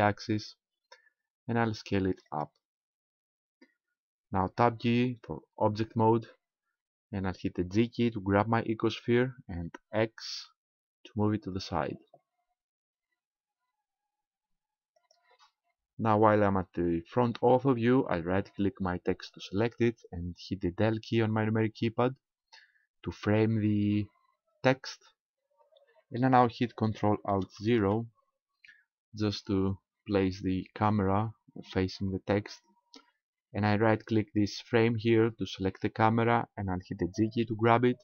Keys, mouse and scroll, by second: 2.4 ctrl+click, 5.6 Tab, 6.2 scroll down 3, 7.2 scroll down 1, 9.0 g, 15.1 ctrl+click, 19.1 right click, 22.3 KP_Decimal, 27.6 ctrl+alt+KP_0, 35.6 right click, 37.4 g.